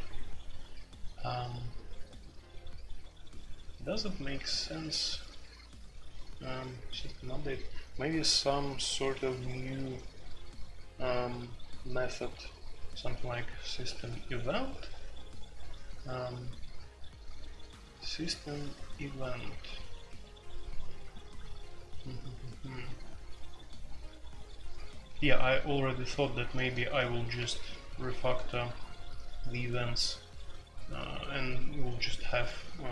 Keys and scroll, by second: 4.5 typing, 6.0 typing, 26.5-28.2 typing.